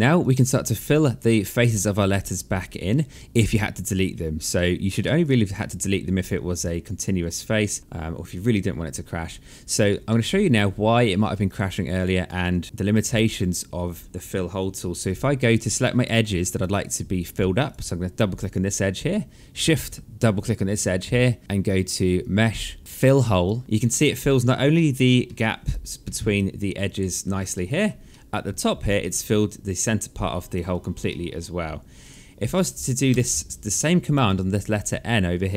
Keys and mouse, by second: 4.1 alt+middle click, 4.8 alt+click, 9.6 alt+middle click, 11.0 alt+click, 13.0 alt+click, 15.1 right click, 15.9 alt+click, 17.2 click, 19.9 shift+click, 21.8 click, 23.6 alt+click, 24.3 alt+middle click, 25.2 alt+click, 25.6 alt+middle click, 25.9 alt+click, 27.1 alt+middle click, 28.4 alt+click, 29.4 right click, 30.2 click, 30.6 alt+middle click, 31.6 click, 32.7 Delete, 33.3 right click, 33.9 alt+click, 35.3 click.